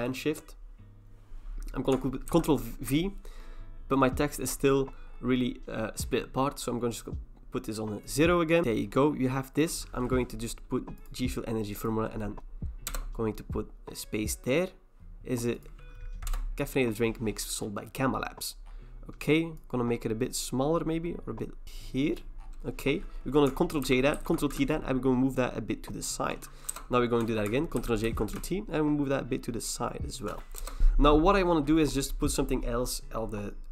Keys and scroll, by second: 2.3 ctrl+v, 12.9 Return, 16.3 BackSpace, 23.9 ctrl+j, 24.2 ctrl+t, 26.7 Return, 27.8 ctrl+j, 28.1 ctrl+t, 30.6 Return.